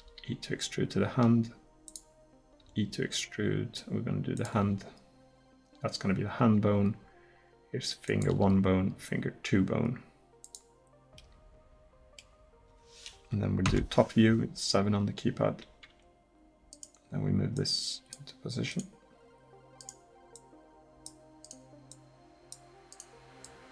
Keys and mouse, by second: 0.0 e, 2.6 e, 4.6 e, 8.4 e, 13.7 KP_7, 16.8 right click.